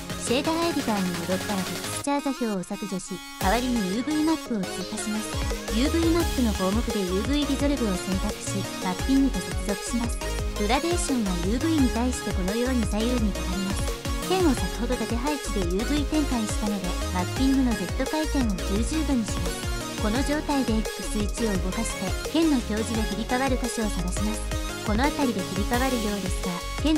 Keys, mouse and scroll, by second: 2.5 click, 2.9 x, 3.5 shift+a, 7.0 click, 8.2 click, 8.4 click, 18.7 click, 21.7-24.0 drag, 24.2 middle click, 24.7-26.9 drag.